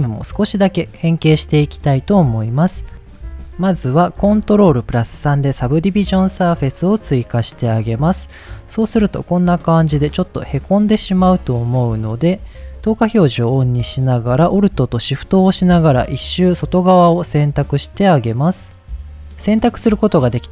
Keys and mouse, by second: 4.8 ctrl+3, 6.4-6.8 middle drag, 8.6 click, 9.9 middle click, 11.0 Tab, 12.8 click, 19.1 alt+shift+click, 20.0 middle click.